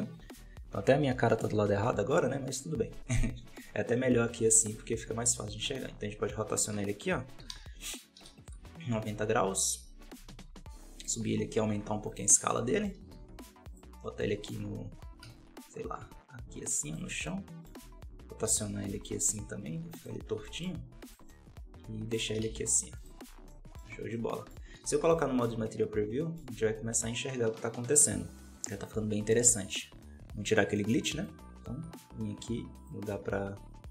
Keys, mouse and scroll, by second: 2.9 middle click, 3.6 scroll up 2, 3.8-5.2 middle drag, 5.2 r, 8.4 KP_1, 10.1 g, 12.4 middle click, 13.0 g, 13.9-14.9 middle drag, 14.9 r, 17.2-18.3 middle drag, 18.3 r, 20.3 g, 21.2-22.3 middle drag, 22.3 g, 23.2 scroll down 1, 23.4 middle click, 23.8 alt+a, 24.0-25.2 middle drag, 25.2 z, 25.7 scroll down 2, 28.4 scroll up 1, 29.5-30.8 right drag, 30.8-33.9 drag.